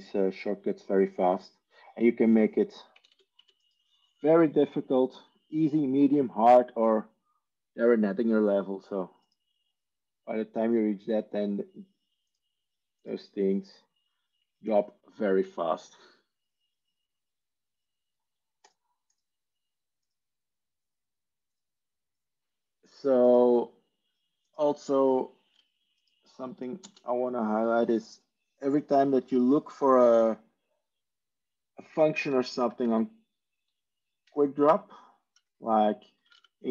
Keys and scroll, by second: 3.6 Tab, 26.8 ctrl+space, 32.4 typing, 34.7-36.7 typing.